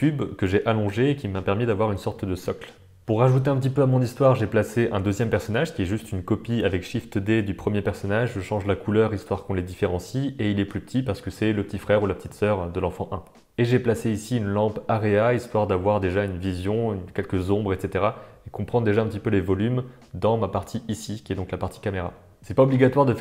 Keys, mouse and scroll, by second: 0.0 shift+a, 0.1 s, 0.5 s, 1.2 middle click, 1.5 s, 1.9 s, 2.2 middle click, 2.3 g, 3.0 middle click, 3.3 click, 3.5 shift+d, 4.3 middle click, 4.9 click, 5.7 click, 5.9 click, 8.8 s, 9.1 g, 10.2 g, 10.6 middle click, 11.1 middle click, 11.4 s, 11.7 g, 12.3 g, 12.6 g, 12.9 middle drag, 13.3 middle click, 13.9-21.3 drag, 21.3 alt+a, 21.6 alt+a, 21.7 right click.